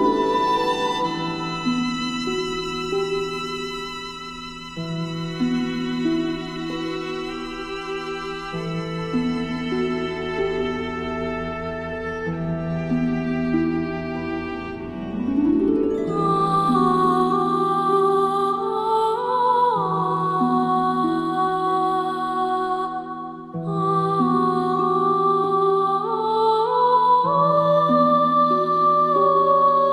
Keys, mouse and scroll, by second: 2.8 right click, 6.6 click, 9.8-12.7 drag, 10.9 click, 11.2 click, 11.8-12.3 click, 12.7 space, 15.2 click, 16.4 right click, 17.4 click, 18.1-21.5 alt+drag, 24.6-26.2 alt+shift+drag, 26.5 alt+scroll up 1, 27.1 space, 27.2 click, 28.1 right click, 28.7 click, 28.8 click, 29.0 space, 29.2-29.9 drag.